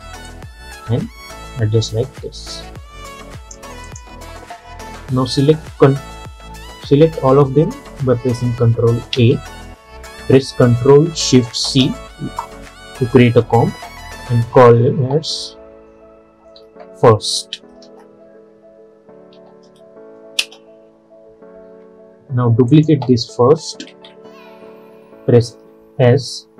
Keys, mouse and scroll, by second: 9.2 ctrl+a, 11.7 ctrl+shift+c, 14.6 ctrl+shift+c, 16.4-17.2 typing, 19.1-19.4 typing, 20.5 Return, 22.8 click, 24.0 ctrl+d, 25.6 s.